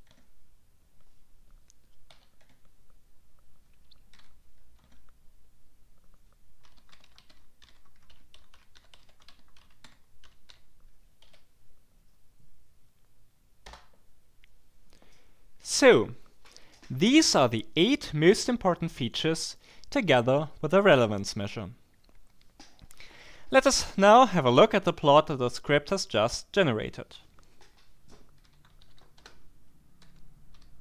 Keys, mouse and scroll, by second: 0.0-0.3 typing, 2.1 d, 2.4 Tab, 4.1 y, 4.8 Tab, 6.4-11.2 typing, 13.6 Return, 28.1-30.8 typing.